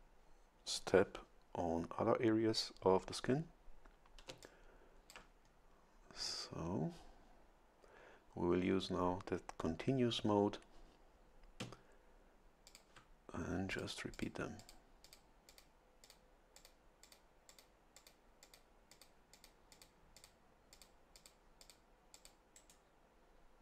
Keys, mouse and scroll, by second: 4.3 a, 4.4 click, 6.3-6.9 scroll up 4, 12.7 ctrl+click, 13.7 click, 14.1 click, 14.6 click, 15.0 click, 15.5 click, 16.0 click, 16.5 click, 17.0 click, 17.5 click, 18.0 click, 18.4 click, 18.9 click, 19.3 click, 19.7 click, 20.2 click, 20.7 click, 21.1 click, 21.6 click, 22.1 click, 22.5 right click.